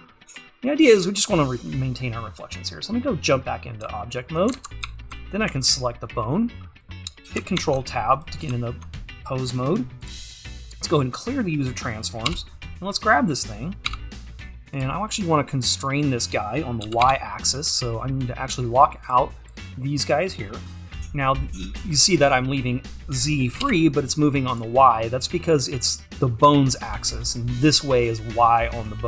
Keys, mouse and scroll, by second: 3.3 click, 3.8 `, 6.7-12.3 scroll up 1, 12.3 right click, 12.4 g, 19.1-23.6 drag, 23.6 g.